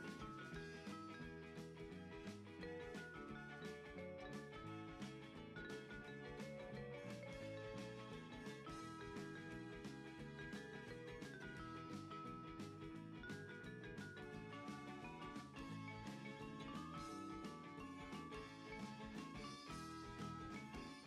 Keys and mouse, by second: 0.4 click, 0.8 KP_1, 2.4 shift+click, 5.5 click, 7.0 shift+middle click, 8.8 shift+middle click, 10.8 click, 11.4 g, 14.4 click, 14.8 KP_3, 16.2 r, 17.2 click, 17.3 g, 18.3 click, 18.5 s, 19.6 click, 20.0 r, 20.9 click.